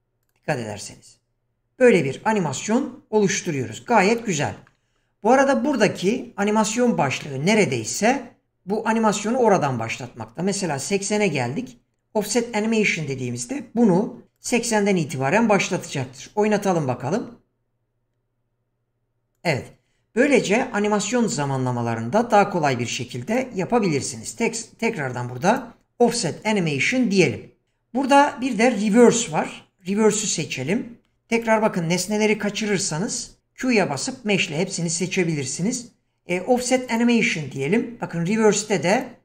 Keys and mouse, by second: 0.3 click, 3.2 click, 8.9 click, 12.2 click, 14.3 click, 16.2 click, 19.3 click, 23.3 click, 25.4 click, 29.0 click, 29.8 click, 31.3 click, 33.2 q, 37.0 click, 39.0 click.